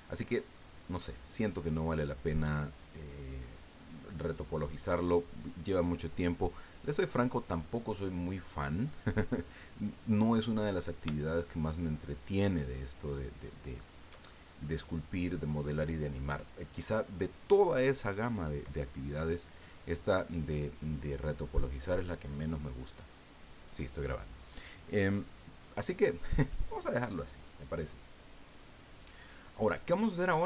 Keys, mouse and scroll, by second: 0.5 click, 10.0 scroll down 2, 11.3-14.2 shift+drag, 14.3 shift+scroll down 2, 22.9 click, 23.5 click, 29.4-29.7 scroll down 2.